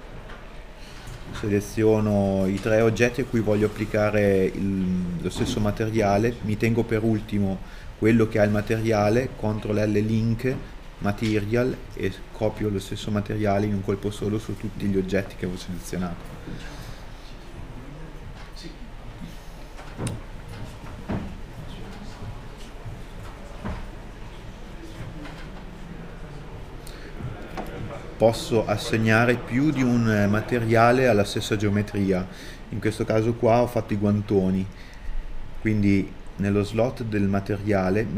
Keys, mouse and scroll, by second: 2.1 middle click, 11.9 scroll down 1, 12.5 middle click, 13.5 scroll down 1, 14.2 middle click, 15.1 KP_Decimal, 19.9 scroll up 1, 20.8 middle click, 31.9 scroll up 1, 32.9 middle click, 33.6 middle click.